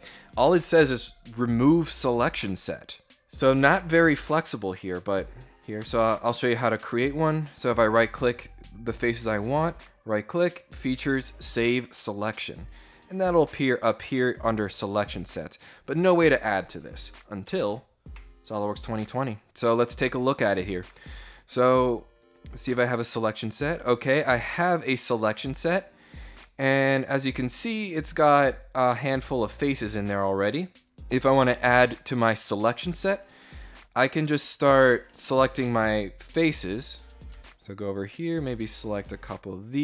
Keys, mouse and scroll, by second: 2.0 click, 4.6 ctrl+click, 5.6 ctrl+click, 7.9 right click, 11.0 click, 13.2 click, 14.6 click, 16.5 click, 20.8 scroll down 1, 22.4 click, 23.4 click, 24.4 click, 25.9 scroll down 1, 26.0-29.6 middle drag, 30.4 scroll down 1, 33.7 click, 35.3 ctrl+middle click, 36.3 middle click, 37.4 ctrl+click, 37.8 ctrl+click, 38.7 ctrl+click.